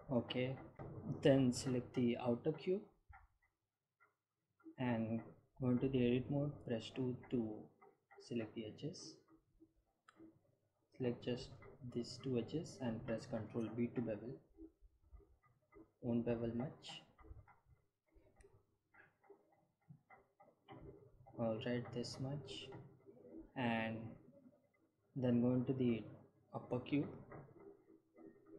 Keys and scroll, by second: 5.9 Tab, 7.8 2, 15.0 ctrl+b, 20.8 Tab.